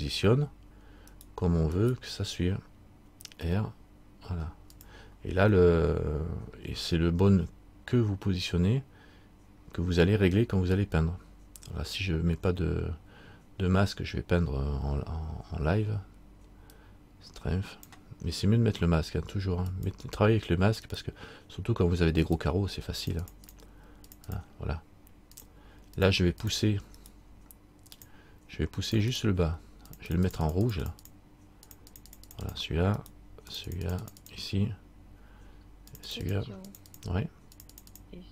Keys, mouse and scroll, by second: 1.3 right click, 3.6 r, 5.8 middle click, 16.9 click, 21.0 click, 21.0 right click, 23.2-25.9 click, 23.2 right click, 27.2 click, 27.2 right click, 28.1 click, 30.6-33.2 click, 33.2 right click, 33.7 click, 36.1 click, 36.6 click.